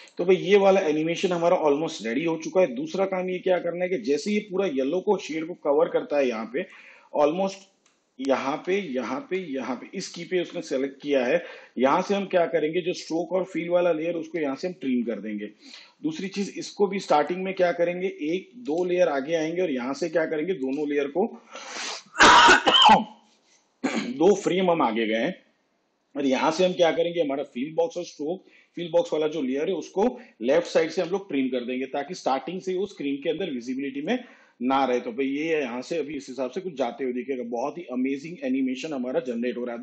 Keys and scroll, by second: 7.7 ctrl+Right, 14.4 alt+], 18.1 ctrl+Right, 30.6 alt+[, 32.8 shift+/.